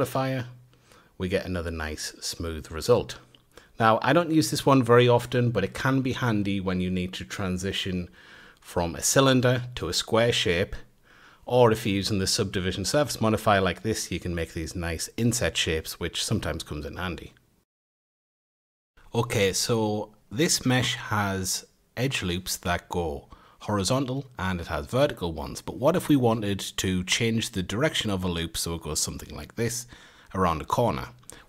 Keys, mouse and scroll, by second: 0.7-1.7 middle drag, 1.7 Tab, 2.9 3, 3.4 click, 3.9 click, 4.9 ctrl+click, 5.9 ctrl+click, 6.5 ctrl+click, 7.8 e, 10.7 ctrl+z, 11.1 ctrl+r, 13.1 middle click, 14.9 middle click, 15.1 Tab, 15.4-16.5 middle drag, 16.5-17.5 scroll down 1, 17.5 middle click, 17.6 F8, 21.4 alt+shift+click, 23.4 a, 23.9 alt+shift+click, 24.9 a, 25.6 click, 26.6 ctrl+click, 27.4 ctrl+click, 28.5 a, 31.1 2.